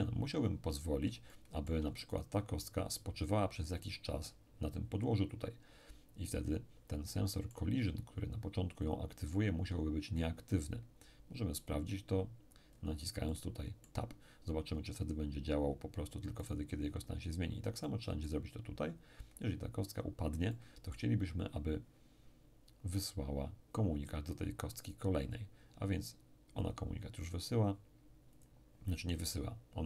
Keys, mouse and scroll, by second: 1.3-3.1 shift+middle drag, 7.1-8.5 middle drag, 8.9 click, 11.6 click, 13.3-14.8 middle drag, 16.4 right click, 17.8 middle click, 18.7-19.8 scroll down 1, 20.5-21.9 middle drag, 26.6 click, 28.3 click.